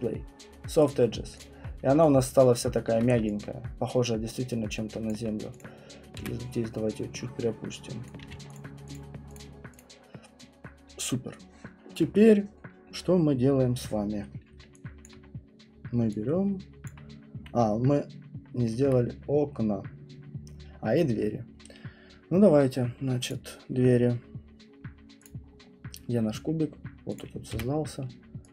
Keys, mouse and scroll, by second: 0.8 click, 1.5 click, 1.5 alt+click, 1.6 middle click, 1.7 middle click, 2.4 alt+click, 3.0 alt+middle click, 4.5 alt+middle click, 5.1 alt+click, 5.6 click, 6.2 w, 8.1 click, 8.2 q, 8.5 click, 8.9 click, 9.3 click, 9.8 click, 10.1 alt+click, 15.0 alt+click, 15.3 middle click, 15.6 middle click, 16.0 middle click, 17.6 middle click, 17.6 middle click, 17.7 middle click, 18.8 alt+right click, 18.8 alt+middle click, 19.5 alt+middle click, 21.2 middle click, 23.3 click, 23.9 middle click, 24.3 middle click, 24.6 middle click, 25.2 click, 25.4 middle click, 27.1 middle click, 27.2 click, 27.5 w.